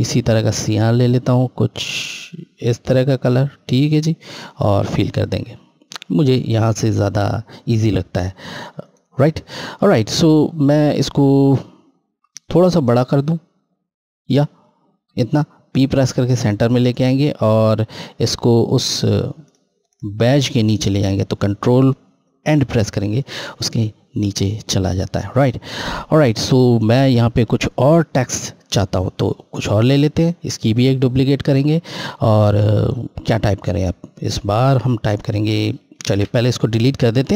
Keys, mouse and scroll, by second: 8.5 right click, 11.1 scroll, 11.3-11.9 scroll down 1, 12.9 shift+Left, 15.6 p, 17.3 click, 17.9 scroll up 1, 18.8 click, 22.3 ctrl+End, 24.3 click, 25.0 scroll down 1, 29.2 click, 30.4 right click, 31.2 scroll, 34.4 F8, 35.9 ctrl+a, 36.4 Delete.